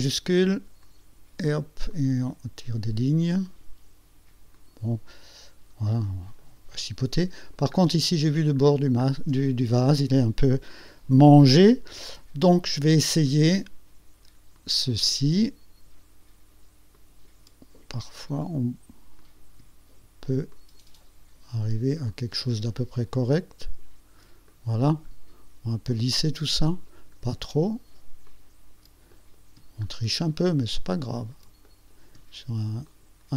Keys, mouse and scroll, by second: 0.9 shift+click, 2.0 click, 3.5 click, 4.7 click, 6.0 click, 6.5 middle click, 7.3 click, 8.1 ctrl+scroll down 2, 8.7-9.3 ctrl+scroll up 4, 14.7 click, 17.0 shift+click, 19.3 click, 20.6 shift+click, 22.2 shift+click, 23.7 shift+click, 24.6 shift+middle click, 26.0 shift+click, 26.7 shift+middle click, 28.4 shift+click, 29.2 shift+middle click, 31.0 shift+click, 31.8 shift+middle click, 33.0 shift+click.